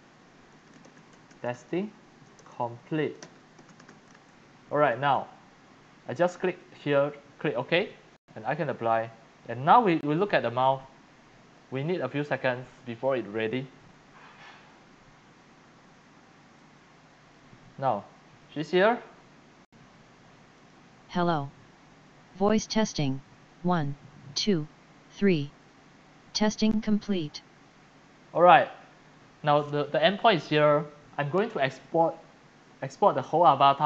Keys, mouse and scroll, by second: 0.0-4.3 typing, 6.5 click, 11.0-15.5 drag, 15.5-16.1 scroll down 7, 16.1-16.5 scroll up 2, 16.5-17.6 x, 16.6 click, 18.4 click, 20.6 click, 28.3 click, 29.2 click, 31.7-32.5 scroll down 9.